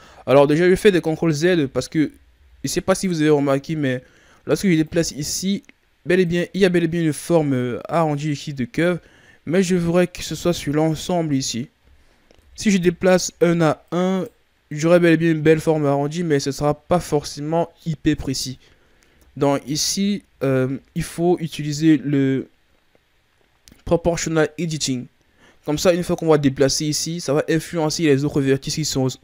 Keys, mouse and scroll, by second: 0.2 ctrl+z, 0.6 ctrl+z, 1.0 ctrl+z, 1.4 ctrl+z, 1.9 ctrl+z, 2.2 ctrl+z, 4.8 click, 6.7-9.6 shift+scroll up 4, 9.6 scroll down 3, 9.9-12.3 middle drag, 12.3 KP_3, 13.2-13.8 scroll up 3, 13.8-17.0 right drag, 17.0 scroll down 2, 19.0 ctrl+z, 19.4 ctrl+z, 19.8 ctrl+z, 20.2 ctrl+z, 20.6 ctrl+z, 21.7 scroll up 1.